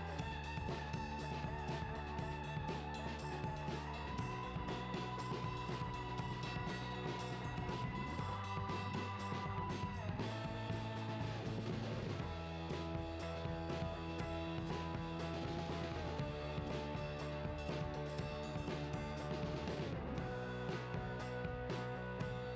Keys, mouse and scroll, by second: 0.1 alt+a, 0.4 scroll up 2, 0.5-3.3 typing, 0.9 click, 1.7 alt+a, 1.9 scroll up 2, 2.0-2.5 scroll down 3, 3.1 click, 4.3 Tab, 4.5 a, 5.2 Tab, 5.4 shift+click, 5.6 shift+h, 5.8 KP_7, 6.1 alt+a, 6.2 scroll down 1, 6.3 click, 6.7 Tab, 6.8 a, 7.3 ctrl+z, 7.5 shift+d, 8.1 click, 8.6 ctrl+m, 8.6 KP_Decimal, 8.9-9.3 scroll up 1, 9.7 g, 10.2 click, 10.3-10.6 scroll down 1, 10.6 KP_7, 11.8 shift+d, 12.5 click, 12.7 scroll up 1, 12.9 `, 13.5 scroll up 1, 13.7 alt+click, 13.9 ctrl+x, 14.3 alt+click, 14.3 ctrl+x, 14.5 click, 14.9 ctrl+l, 15.1-15.5 scroll down 2, 15.2 KP_7, 15.7 shift+d, 16.7 ctrl+z, 16.9 click, 17.6 ctrl+l, 17.9-22.3 typing, 18.3 click, 19.6 alt+a, 20.5 click, 21.3 Tab.